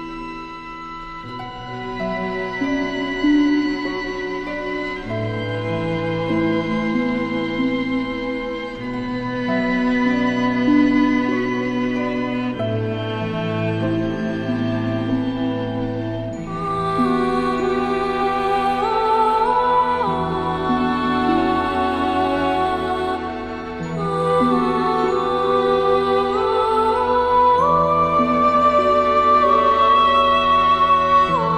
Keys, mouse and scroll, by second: 0.7-1.3 drag, 3.6 space, 3.7 click, 5.0 space, 5.1 click, 8.8 space, 8.9 click, 9.2 space, 10.0-14.4 drag, 26.0 alt+scroll down 2, 26.1 space, 26.2 click, 26.9 click, 27.4 space, 28.4 space, 29.4 right click, 30.3-31.5 drag.